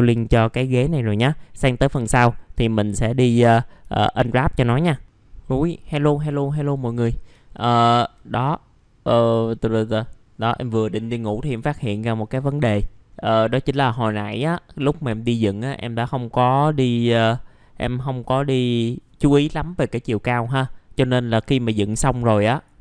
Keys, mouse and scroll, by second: 0.3 middle click, 0.6 alt+middle click, 2.0 alt+middle click, 3.9 alt+middle click, 5.0 click, 7.1 scroll down 1, 7.5 alt+middle click, 8.4-9.3 scroll up 1, 9.4 alt+middle click, 11.4 click, 11.9 middle click, 12.0-12.3 scroll down 1, 12.4 alt+middle click, 12.9 scroll up 1, 15.6 scroll down 1, 16.8 middle click, 20.9-21.9 scroll up 1, 21.9 middle click, 22.5 click.